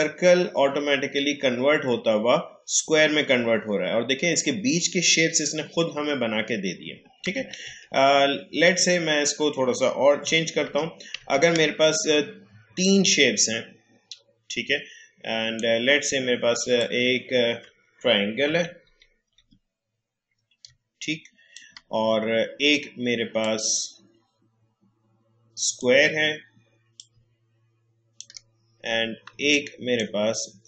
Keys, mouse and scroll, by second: 7.3 click, 7.6 ctrl+z, 12.8-18.4 drag, 18.4 Down, 23.4-29.3 drag, 29.3 space, 29.9 space.